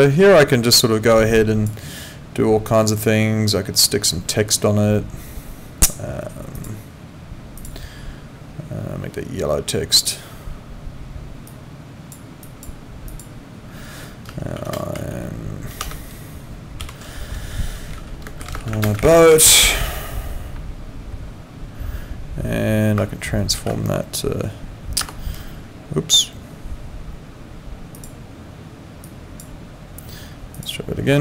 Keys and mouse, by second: 6.5 click, 10.0 click, 11.5 click, 14.9 m, 15.8 BackSpace, 16.8 ', 18.2-19.5 typing, 25.0 Escape, 28.0 click, 29.0 click, 30.5 click.